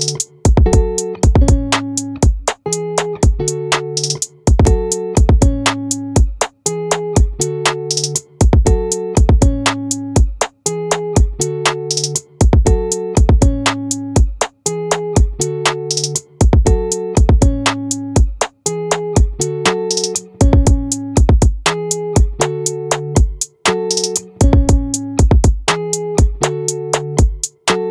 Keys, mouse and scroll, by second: 0.5 right click, 5.0 click, 7.5 click, 12.8 Tab, 15.4 middle click, 22.0 z.